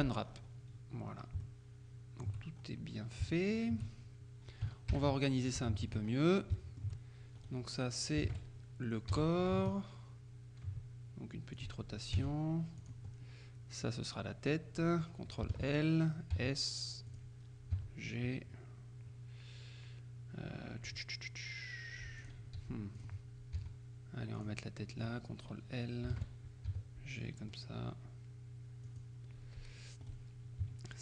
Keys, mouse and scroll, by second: 1.1-1.5 scroll down 1, 1.5 shift+middle click, 1.5 shift+click, 2.6-3.1 shift+scroll up 1, 3.4 shift+click, 5.0 ctrl+Up, 5.7 shift+click, 6.1-6.6 shift+scroll up 1, 6.6 shift+middle click, 7.4 shift+right click, 8.3 ctrl+l, 9.1 r, 11.6 click, 11.6-12.2 scroll up 1, 12.2 g, 12.9 click, 13.1-13.7 scroll down 1, 13.7 scroll down 1, 13.9 right click, 15.6 ctrl+l, 16.4 s, 17.2 click, 17.9 g, 22.3 click, 22.7 s, 23.1 click, 23.7 g, 24.5 click, 25.1 right click, 26.2 ctrl+l, 26.7 ctrl+g, 28.9 click, 30.1 right click.